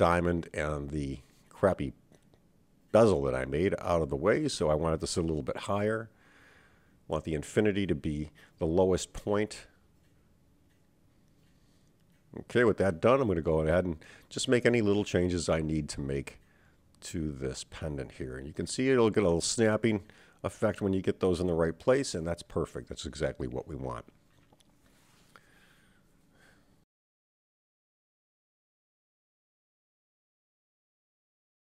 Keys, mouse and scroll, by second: 0.7 click, 1.6 shift+click, 2.5 click, 2.7-5.3 drag, 5.6-7.5 middle drag, 8.0 click, 8.4-9.4 drag, 9.7-10.9 middle drag, 11.1-11.6 middle drag, 12.1 click, 12.9 Tab, 14.9 click, 16.1 e, 26.0 Tab, 26.8 click.